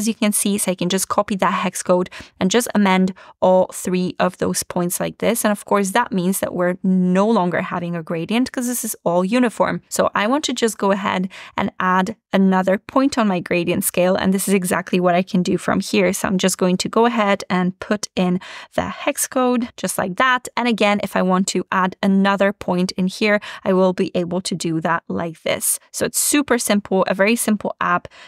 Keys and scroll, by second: 0.0 super+c, 3.9 super+v, 6.0 super+v.